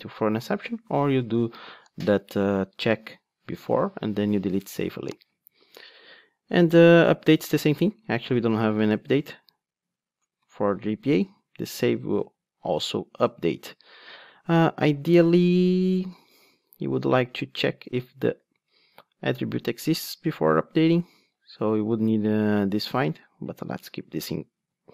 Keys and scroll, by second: 9.9 Return, 11.5 Return, 14.4 Escape, 17.2 Return, 24.6 super+x.